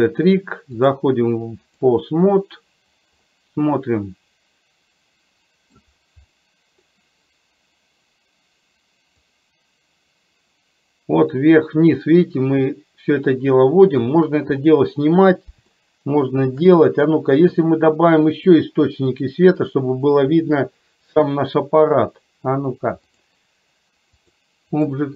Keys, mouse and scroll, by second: 1.0-2.1 drag, 3.5-6.0 middle drag, 9.6-14.2 drag, 16.0-16.8 shift+middle drag, 19.2-23.2 drag, 24.3 click.